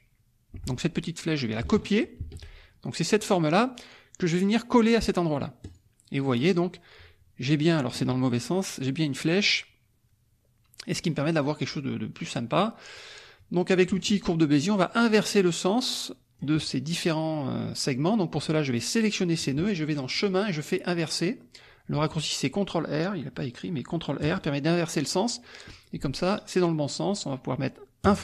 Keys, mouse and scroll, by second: 0.5 F1, 2.2 ctrl+c, 3.1 click, 5.6 click, 13.8 click, 14.6-16.5 drag, 18.5-19.5 drag, 20.1 click, 24.2 click, 28.1 click.